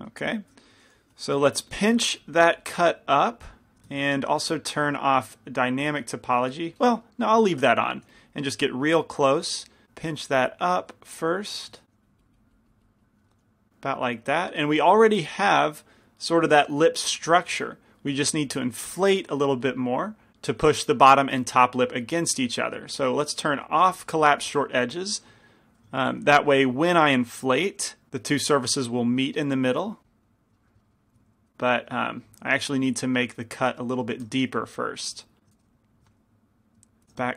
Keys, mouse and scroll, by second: 1.8 p, 1.8 f, 2.5-4.9 drag, 4.9 ctrl+z, 7.2 click, 7.7 click, 8.2 f, 10.2-13.9 drag, 13.9 middle click, 14.3 middle click, 18.5 f, 24.5 click, 24.5 f, 26.7 f, 28.1 f, 28.1 i, 30.6 click, 31.6 ctrl+z, 33.3 ctrl+z, 35.3 ctrl+z, 35.9 ctrl+z, 36.5 ctrl+z.